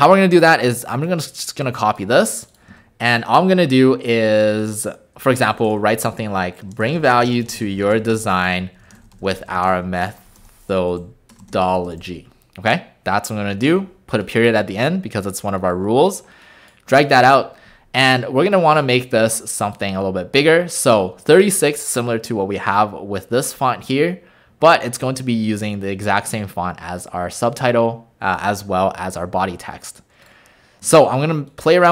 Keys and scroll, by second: 2.7 ctrl+a, 5.3-12.6 typing, 17.3 ctrl+a.